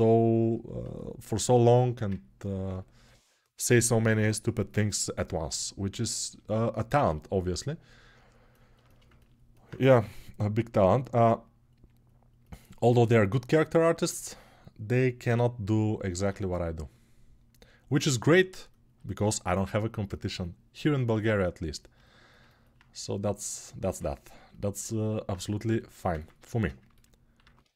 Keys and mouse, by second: 9.8 g, 11.0-12.6 drag, 13.4-27.7 alt+drag.